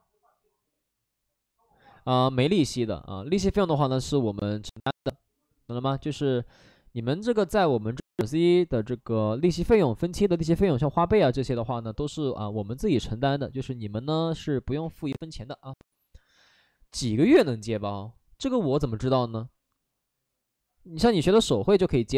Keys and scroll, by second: 2.8 ctrl+d, 6.0 ctrl+d, 13.2 ctrl+d.